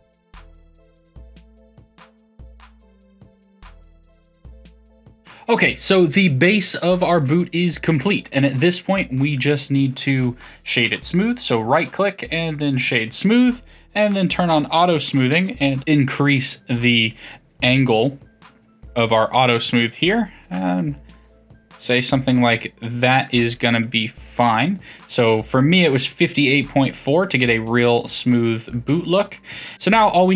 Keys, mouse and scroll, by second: 0.0-3.6 typing, 0.1 ctrl+click, 0.4 middle click, 0.6 middle click, 0.8 click, 0.9 click, 1.4 middle click, 1.7 click, 1.9 alt+h, 2.0 middle click, 2.2 click, 2.3 middle click, 2.5 middle click, 2.9 middle click, 2.9 click, 3.0 shift+click, 3.1 middle click, 3.3 middle click, 3.4 F1, 3.6 middle click, 3.7 middle click, 3.7 shift+click, 4.0 middle click, 4.1 Tab, 4.3 middle click, 5.1 KP_3, 5.3 click, 8.3 Tab, 8.9-10.4 middle drag, 10.4-13.5 right drag, 14.1 click, 15.8-21.1 drag, 21.1-24.2 middle drag, 25.3-29.7 middle drag, 29.7 Tab.